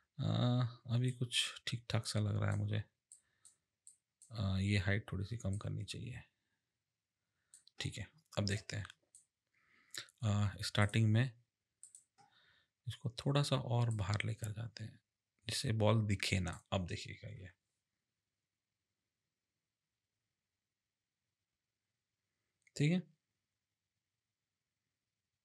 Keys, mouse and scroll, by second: 1.0 click, 3.1 click, 3.8 click, 5.5 click, 8.5 click, 10.8 click, 11.8 click, 13.9 click, 17.2 space.